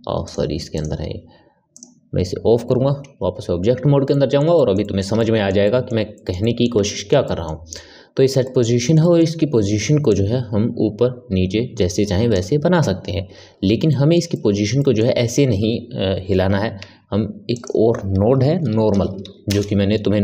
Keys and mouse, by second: 0.2 click, 1.8-3.0 drag, 3.0 Tab, 4.0-10.0 middle drag, 10.0-13.1 drag, 13.5 ctrl+z, 13.8-16.8 middle drag, 16.8 shift+a.